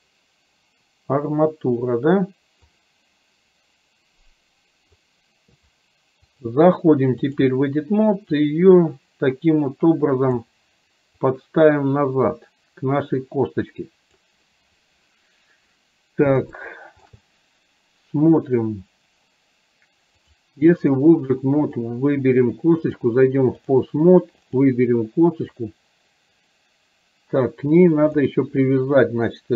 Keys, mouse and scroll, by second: 2.8-5.1 drag, 6.6-7.6 drag, 8.5-10.5 drag, 11.3-14.2 drag, 16.7 shift+middle click, 20.3 click, 21.7 click, 22.8-23.8 drag, 24.6 click, 25.7-28.2 drag.